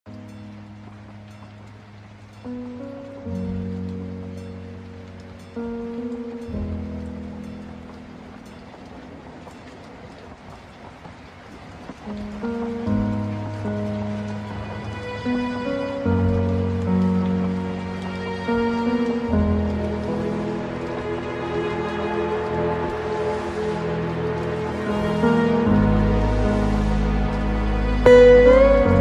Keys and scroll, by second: 2.6 ctrl+z, 8.8 ctrl+z, 27.3 ctrl+space.